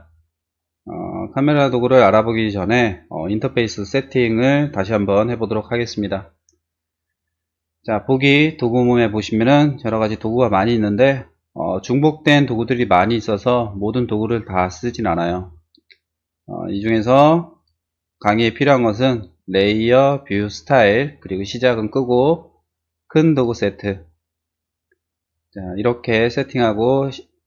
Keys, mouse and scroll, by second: 8.1 click, 8.7 click, 10.8-11.5 scroll down 1, 12.7-13.5 scroll up 1, 17.5 click, 18.1 click, 18.6-18.9 scroll down 1, 20.0 click, 21.5 click, 22.2-22.6 scroll down 2, 23.3 click, 25.2 click.